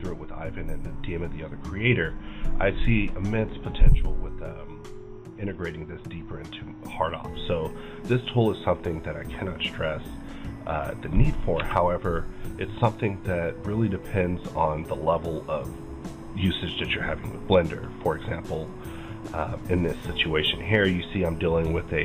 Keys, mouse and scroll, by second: 5.2 alt+m, 5.2 scroll down 1, 5.5-7.2 middle drag, 6.9-7.7 scroll up 2, 7.7-10.2 middle drag, 8.0-8.3 scroll up 1, 8.9-10.2 scroll down 1, 10.2 right click, 11.6 KP_Divide, 15.5-21.7 drag, 18.9 right click.